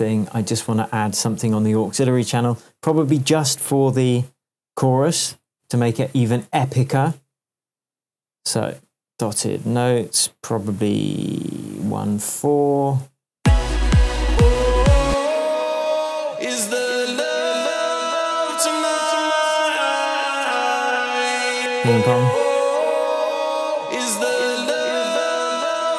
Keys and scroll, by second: 12.1 Tab, 13.3 space, 19.0 Tab.